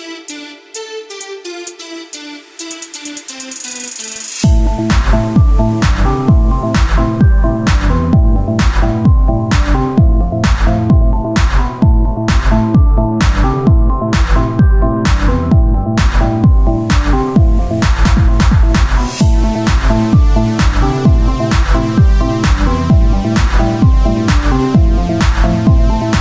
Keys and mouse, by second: 0.8 ctrl+z, 1.6 f, 2.2 Tab, 6.4 Tab, 7.1 s, 9.6 click, 10.4 s, 11.5 Tab, 12.3-13.5 drag, 14.0 Tab, 16.5 Tab, 17.4 KP_1, 19.1 r, 21.0-23.4 drag, 21.7 r, 25.4 click.